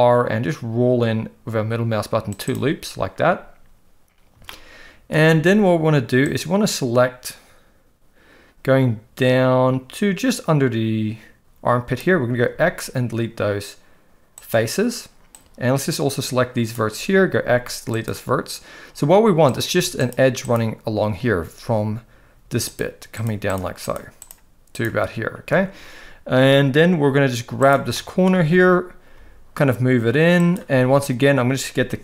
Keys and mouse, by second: 4.6 shift+middle click, 6.4-12.0 drag, 12.4 x, 15.3-16.7 drag, 17.3 x, 19.9 shift+click, 22.6 shift+click, 23.2 shift+click, 27.9 shift+middle click, 29.2 g.